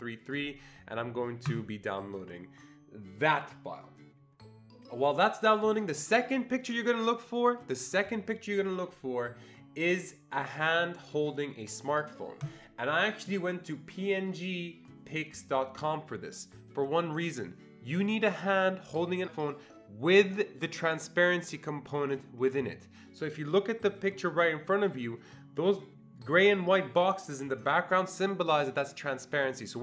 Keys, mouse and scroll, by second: 1.5 click, 12.4 click.